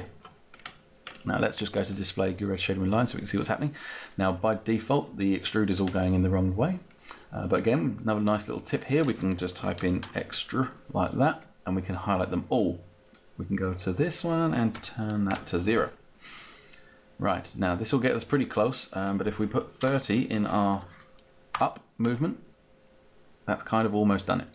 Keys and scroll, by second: 9.2-10.4 typing, 14.7 0, 15.3 Return, 20.3 3, 20.7 0, 21.5 Return.